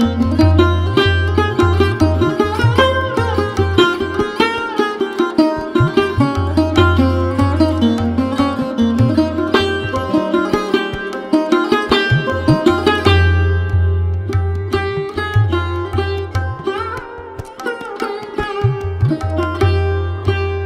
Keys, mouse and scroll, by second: 0.2 scroll up 4, 0.6 click, 1.1 alt+shift+click, 1.5 click, 1.7 shift+click, 2.1 shift+click, 2.4 shift+click, 2.6 shift+click, 2.8 shift+click, 3.1 shift+click, 3.3 shift+click, 5.3 shift+click, 6.0 shift+click, 7.1 click, 7.5-7.9 drag, 7.9-8.6 scroll down 2, 8.6 click, 9.1-10.0 scroll down 1, 10.0 scroll down 2, 10.1 click, 10.5-10.9 drag, 10.9 Tab, 11.3 click, 11.5-12.3 scroll down 7, 12.3 click, 13.2 shift+z, 13.9 click, 15.7 shift+click, 16.6 click, 16.8 click, 17.5 shift+z, 17.9 shift+z, 18.4 click, 19.4 shift+click, 20.0 shift+z.